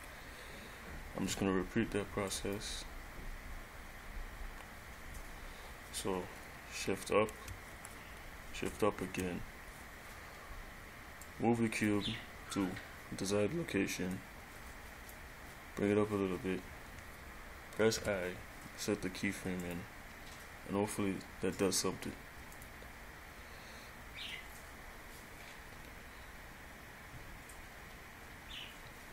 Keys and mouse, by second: 2.5 click, 7.9 shift+Up, 11.4 click, 12.1 click, 12.3 click, 14.7 click, 15.8 click, 18.2 i, 22.7 click.